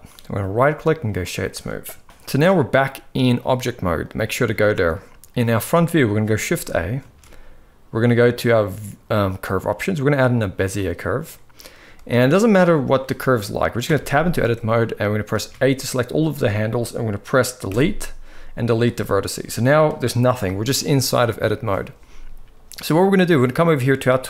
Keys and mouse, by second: 0.2-0.9 right drag, 1.9 KP_1, 3.1-3.8 drag, 4.2-4.5 shift+middle drag, 6.7 shift+a, 12.0 middle drag, 13.8 Tab, 14.1 middle click, 15.1 a, 17.4 Delete, 20.1 KP_1.